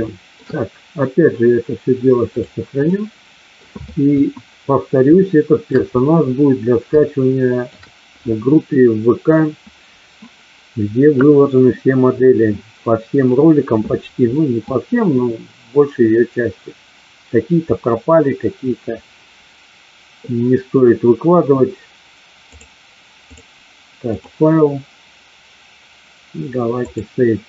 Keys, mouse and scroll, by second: 0.1 shift+middle click, 2.2 click, 2.8-3.5 middle drag, 4.1 KP_1, 5.2-5.7 shift+middle drag, 6.8-7.7 shift+middle drag, 22.6 click, 24.0-27.0 drag.